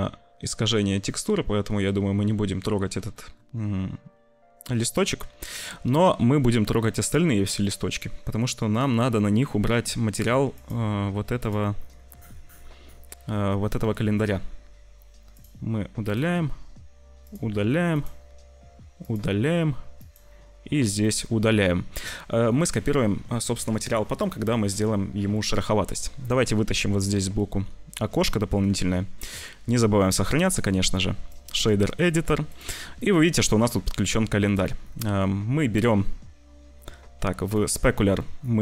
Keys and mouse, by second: 1.7 shift+middle click, 3.1 shift+middle click, 5.0 ctrl+s, 6.6 click, 7.6 click, 10.5 click, 17.2 click, 19.9 click, 27.0-28.2 middle drag, 28.7 ctrl+s, 30.0-31.5 drag, 32.0 click, 32.9 click, 37.4 click.